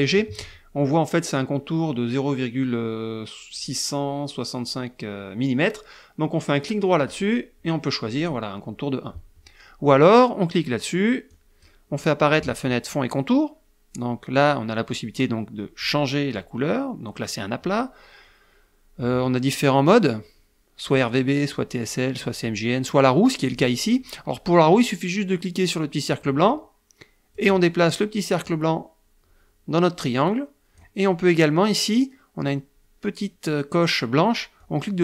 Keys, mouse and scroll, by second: 7.1 right click, 8.2 click, 11.3 click, 15.8 click, 23.5 click, 26.0-27.5 drag, 28.4-30.9 drag, 34.5-35.0 drag.